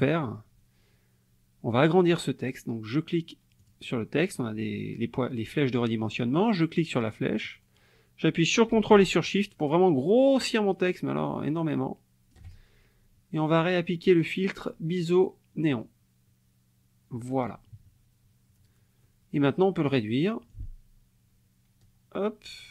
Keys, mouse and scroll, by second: 3.6 click, 7.4-11.0 drag, 11.0 ctrl+shift+right click, 11.6 ctrl+shift+click, 13.6 click, 15.6 click, 17.7 KP_Subtract, 19.0 click, 20.5-22.7 ctrl+shift+drag.